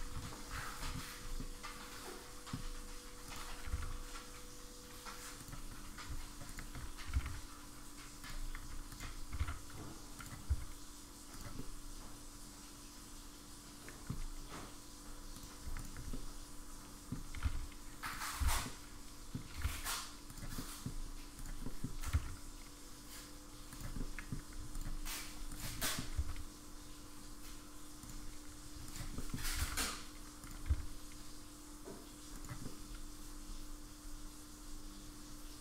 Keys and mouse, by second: 1.4-2.5 middle drag, 3.6 g, 6.5 alt+click, 7.1 g, 8.9 alt+click, 9.3 g, 10.5 s, 11.6-14.1 middle drag, 15.3 click, 15.8 alt+click, 16.1-17.1 middle drag, 17.3 g, 18.7 alt+z, 18.7 middle click, 19.6 g, 20.6 middle click, 21.6 middle click, 22.1 g, 24.0 middle click, 25.8 middle click, 26.2 s, 28.8 alt+click, 29.2 middle click, 29.5 g, 30.7 s, 32.6-35.6 middle drag.